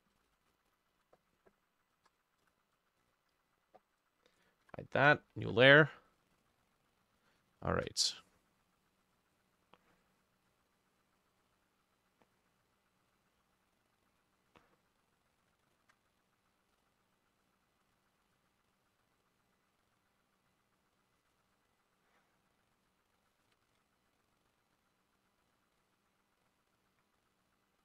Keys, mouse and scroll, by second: 0.2 ctrl+a, 0.3 ctrl+c, 0.7 double click, 1.0 ctrl+v, 2.0 BackSpace, 2.1 3, 2.5 Return, 4.7 Insert, 6.4 ctrl+click, 7.7 shift+click, 15.8 ctrl+click, 18.4-25.8 drag, 23.6 ctrl+middle click, 23.7 ctrl+z, 26.8 double click.